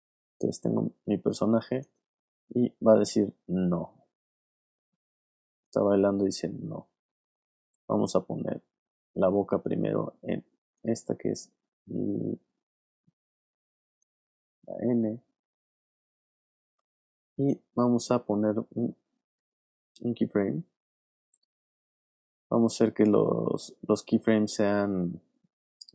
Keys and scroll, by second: 1.2 alt+space, 2.1 space, 7.9 alt+space, 10.3 space, 13.3 space.